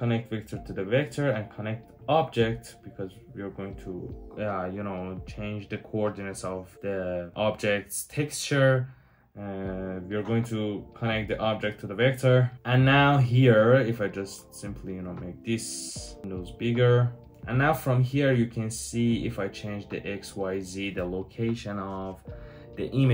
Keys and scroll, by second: 9.0 typing.